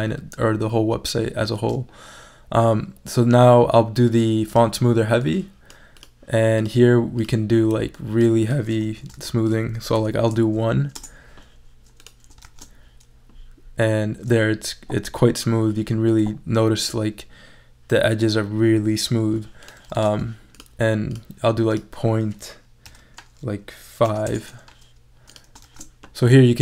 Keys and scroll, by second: 9.1 super+a, 9.9 super+i, 10.9 Return, 12.4 shift+super+e, 24.1 5, 24.3 Return, 25.6 shift+super+e.